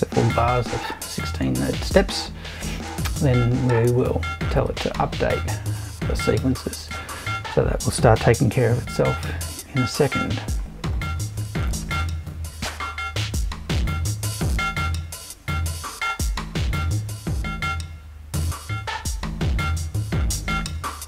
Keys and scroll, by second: 0.4 Left.